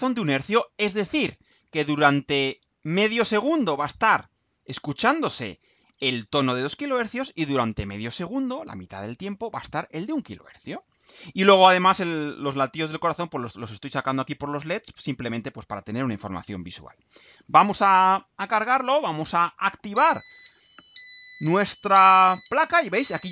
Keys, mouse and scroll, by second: 16.8 ctrl+u.